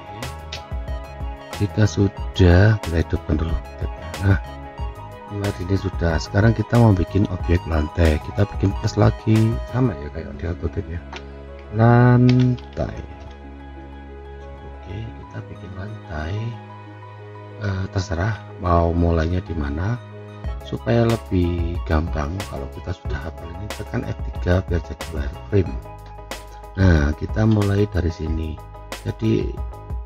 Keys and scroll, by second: 0.5 5, 1.6 Return.